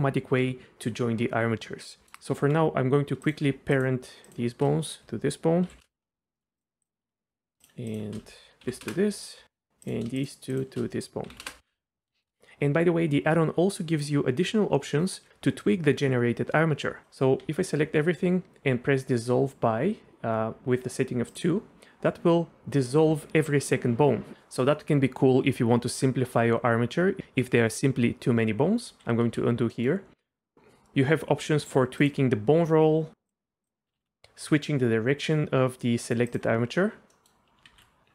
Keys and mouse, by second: 2.0 middle click, 2.3 Tab, 4.2 shift+click, 5.6 ctrl+p, 6.4 middle click, 6.6 click, 8.6 ctrl+p, 9.8 click, 10.2 shift+click, 10.5 shift+click, 11.2 ctrl+p, 12.0 click, 12.1 shift+click, 12.4 ctrl+z, 17.4 a, 29.3 ctrl+z, 29.7 click, 32.0 click, 33.2 click, 34.0 ctrl+z, 36.3 click, 37.1 middle click, 37.7 ctrl+z.